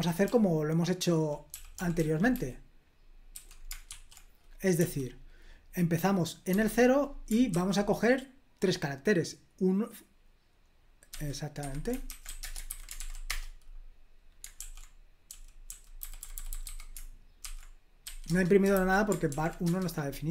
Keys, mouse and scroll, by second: 0.0-2.3 typing, 3.3-4.7 typing, 6.5 0, 11.1-12.7 typing, 11.6 Escape, 12.9 ctrl+p, 13.2 Return, 14.5 super+l, 15.2-18.0 typing, 18.2 Return, 18.7 super+h, 19.2 ctrl+p, 19.6 Return, 20.0-20.3 typing.